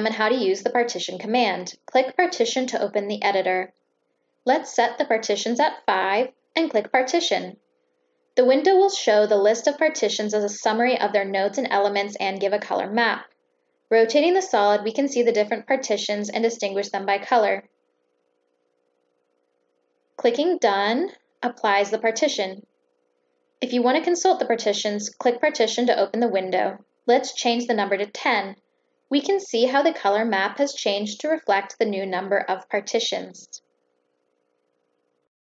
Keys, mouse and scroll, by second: 2.3 click, 3.6-4.1 drag, 5.2 click, 5.5 click, 5.8 click, 6.2 click, 7.9 click, 15.4 ctrl+middle click, 18.3-18.7 ctrl+scroll up 3, 19.0-20.1 ctrl+middle drag, 22.2 click, 23.8 click, 24.7 click, 25.9 click, 26.6 click, 26.9 click, 27.0 click, 27.3 click, 28.0 click, 35.0 click.